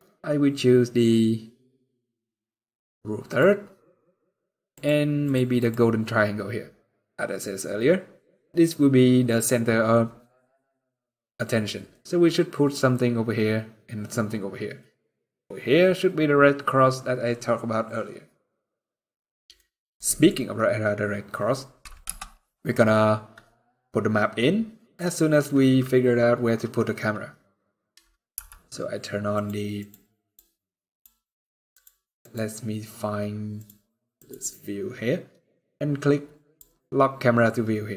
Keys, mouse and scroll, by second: 1.7-2.6 scroll down 2, 3.0 click, 4.5 click, 17.3-18.0 scroll up 1, 18.0-19.3 scroll down 1, 19.3 middle click, 20.1-20.7 scroll up 3, 20.7 scroll down 2, 21.8 KP_0, 28.1 n, 29.1 click, 29.5 click, 33.3 click, 33.9 click.